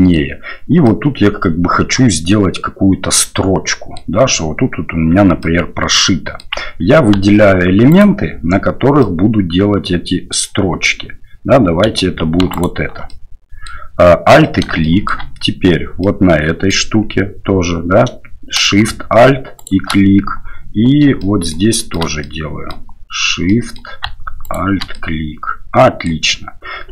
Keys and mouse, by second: 0.8-4.0 middle drag, 5.4-6.4 middle drag, 7.9 alt+right click, 9.0-10.4 middle drag, 11.9 2, 12.5 alt+right click, 13.1 middle click, 14.8 shift+click, 16.0 click, 19.6 alt+shift+click, 21.2 shift+middle click, 21.8 shift+middle click, 22.2 middle click, 23.5 middle click, 24.5 alt+shift+right click, 24.9-26.1 middle drag.